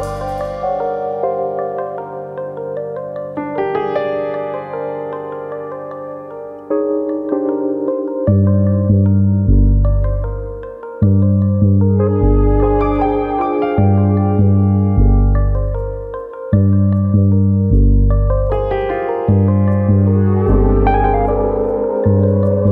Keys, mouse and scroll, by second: 0.8 click, 2.3 alt+click, 3.1 click, 4.4 click, 4.8 alt+click, 5.2 alt+click, 6.5 alt+click, 7.3 middle click, 8.2 middle click, 8.4 shift+middle click, 10.8 ctrl+KP_7, 11.9 alt+click, 12.9 s, 15.4 alt+click, 16.3 s, 17.8 alt+click, 18.6 s, 20.4 alt+click, 22.0 s.